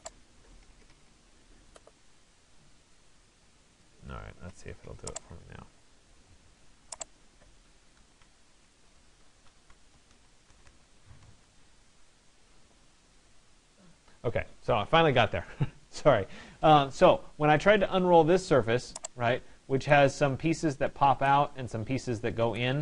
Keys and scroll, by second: 8.5 BackSpace.